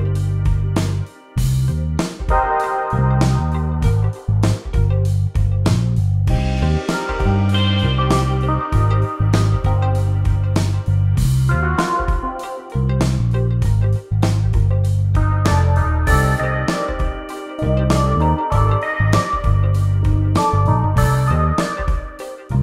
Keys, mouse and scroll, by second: 4.0 click, 6.1 click, 8.2 click, 13.5 Delete, 15.1 click.